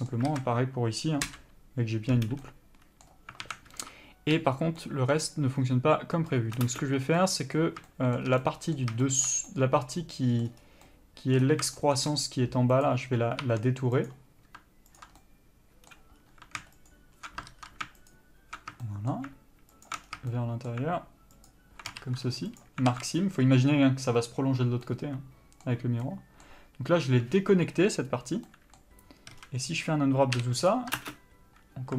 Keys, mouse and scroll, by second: 0.0 scroll down 1, 0.1 middle click, 0.5 alt+a, 1.5 l, 2.6 middle click, 3.6 alt+a, 4.0 1, 4.6 3, 5.0 middle click, 5.4-6.5 scroll up 1, 6.9 ctrl+space, 6.9-11.6 middle drag, 10.8 scroll up 1, 11.6 scroll down 2, 11.8 scroll up 2, 12.0-13.0 shift+middle drag, 13.0 click, 13.6 2, 14.2-15.2 drag, 15.4-16.4 middle drag, 16.4-17.1 scroll up 2, 17.1 ctrl+alt+shift+click, 17.7 ctrl+z, 18.3 alt+shift+click, 19.1-20.1 shift+middle drag, 20.1 alt+shift+click, 20.3 scroll down 2, 20.5-21.7 shift+middle drag, 21.7 alt+shift+click, 22.8 ctrl+e, 23.1 alt+a, 23.3 scroll down 1, 25.1-31.2 middle drag, 29.5 a, 29.6 scroll down 1, 30.9 u, 31.2 ctrl+space.